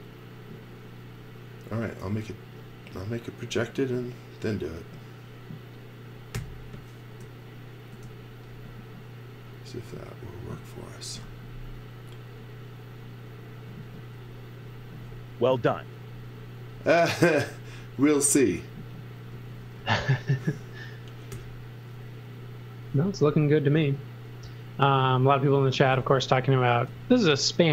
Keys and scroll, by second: 6.3 n, 19.3 x, 19.8 v, 21.3 n, 25.5-26.4 typing.